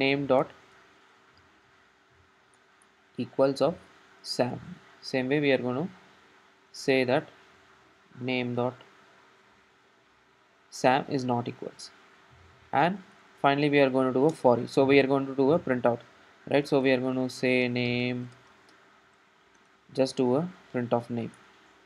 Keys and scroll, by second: 2.6 Return, 14.4 Return, 19.6 Tab, 21.4 Tab, 21.4 Return.